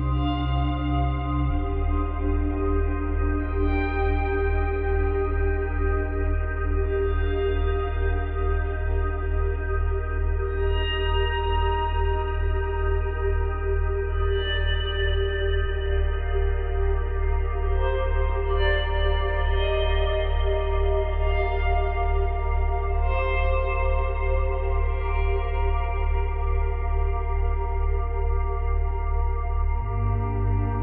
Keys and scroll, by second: 1.0 space, 3.6 space, 4.8 space, 5.7 space.